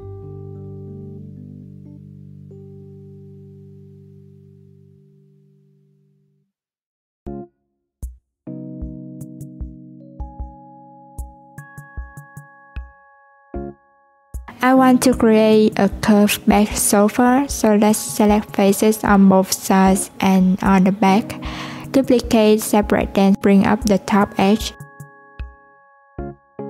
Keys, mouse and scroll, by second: 1.1 Tab, 2.4 click, 3.2 alt+z, 4.0 click, 4.4 Tab, 7.9 click, 9.1 alt+z, 9.4 click, 10.3 click, 12.6 click, 13.2 Tab, 13.8 alt+z, 17.1 Tab, 20.5 shift+click, 23.3 shift+d, 24.9 p, 26.0 Tab, 26.3 click.